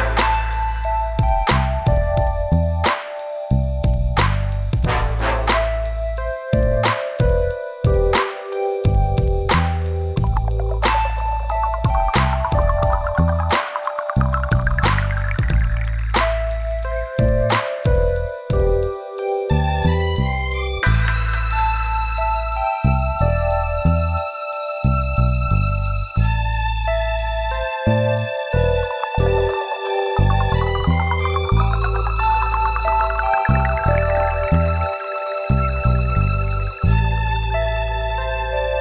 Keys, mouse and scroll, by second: 1.2 click, 1.9 scroll down 2, 2.8 middle click, 4.0 scroll down 1, 4.6 middle click, 6.5 click, 7.3 click, 9.6 click, 10.1 click, 12.6 click, 14.3 click, 16.3 click, 17.9 click, 18.7 click, 19.8 click, 20.4 click, 21.1 click, 24.6 click, 25.5 click, 26.7 click, 29.0 click, 30.0 scroll up 2, 31.3 scroll up 1, 31.8 right click, 32.8 click, 33.7 click, 35.1 click, 35.9 click, 36.5 right click, 37.1 click, 37.9 click.